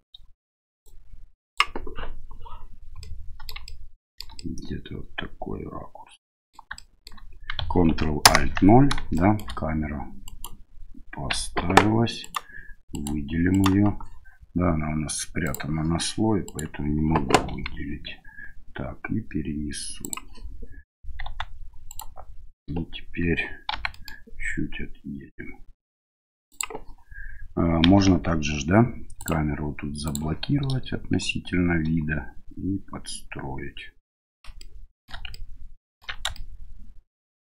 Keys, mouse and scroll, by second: 0.8-1.6 drag, 3.0-3.5 middle drag, 3.6-4.2 shift+middle drag, 4.4-6.5 middle drag, 6.8 shift+middle click, 9.1 middle drag, 10.2 right click, 11.6 ctrl+z, 12.2 right click, 12.9 right click, 13.5 right click, 15.4 click, 16.4 right click, 17.5 g, 21.2 s, 23.7 g, 27.8 n, 29.2 click, 34.6-35.1 shift+middle drag, 35.4 ctrl+middle click, 36.4-37.5 shift+middle drag.